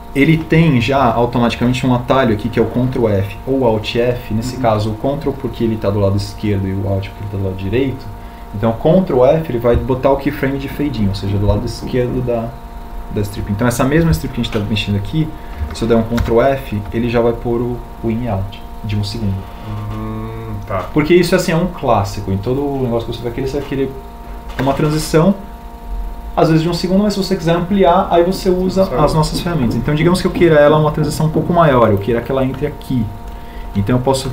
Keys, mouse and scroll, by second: 16.5 ctrl+f.